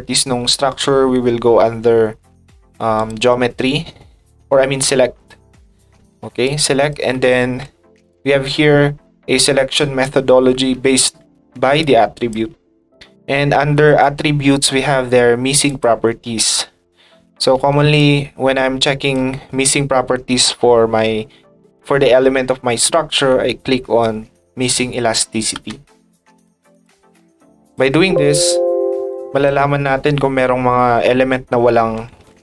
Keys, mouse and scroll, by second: 2.9 click, 5.2 click, 6.4 ctrl+click, 8.1-10.0 ctrl+drag, 11.8 ctrl+click, 15.6 click, 18.0-19.1 ctrl+drag, 26.3 click, 26.7 click, 27.6 click, 29.1 click.